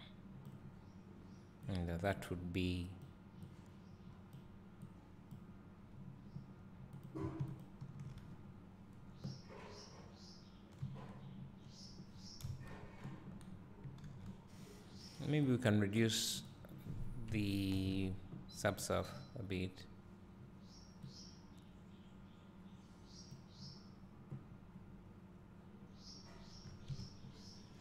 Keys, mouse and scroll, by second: 4.5-7.2 drag, 7.8 ctrl+shift+click, 12.5 KP_0, 13.5-13.8 scroll down 1, 15.8 click, 19.0 click, 21.5-27.8 drag, 25.5-27.8 scroll up 2.